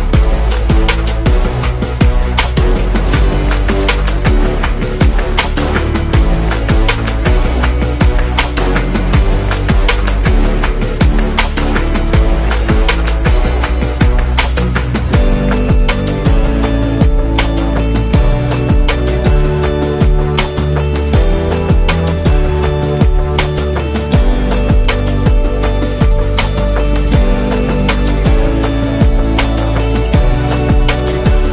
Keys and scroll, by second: 1.0 super+0, 17.3 v, 17.9 z, 19.4 space, 25.1-26.7 typing, 29.7-31.5 typing.